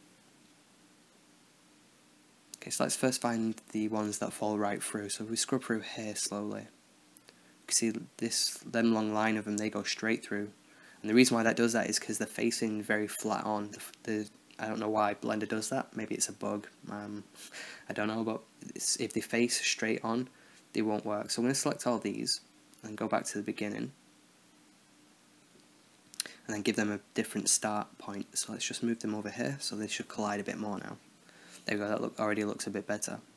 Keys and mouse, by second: 1.2-2.4 drag, 2.4 KP_0, 4.6-5.9 drag, 7.1 middle click, 15.6-22.0 drag, 22.1 click, 22.4-24.1 middle drag, 24.9-25.6 middle drag, 25.7-26.2 drag, 26.9-27.2 middle drag, 28.4 middle click, 28.8-29.3 drag, 29.5-30.1 middle drag, 30.1-30.5 drag, 30.5 alt+a, 30.6 click, 32.1 KP_0, 32.8-33.3 drag.